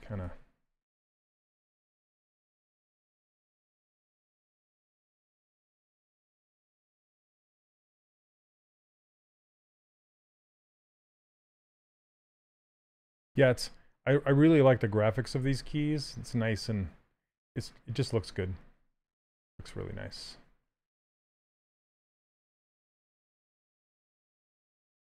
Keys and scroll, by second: 1.1 ctrl+z.